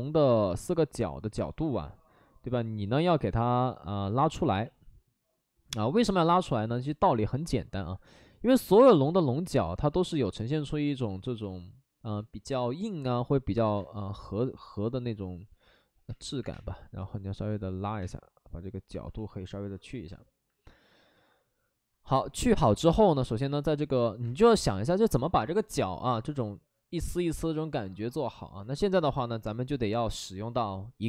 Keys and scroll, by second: 4.4 ctrl+z, 4.5 ctrl+z, 9.6 alt+s, 10.4 alt+s, 13.7 space, 14.5 space, 16.0 space, 16.3 3, 16.4 space, 18.0 space, 22.1 space, 24.2 space.